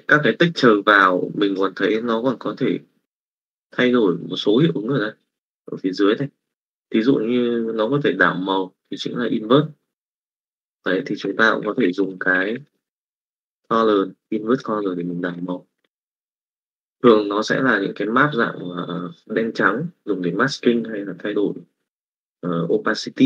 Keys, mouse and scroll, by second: 12.4 s.